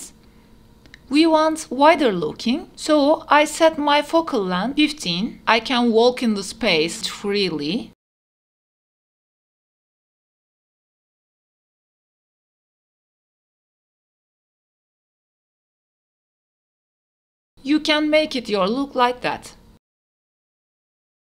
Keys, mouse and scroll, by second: 0.4 KP_0, 2.3 click, 3.1-4.1 drag, 5.3 q, 13.8 click, 16.2-17.2 drag, 18.3 q.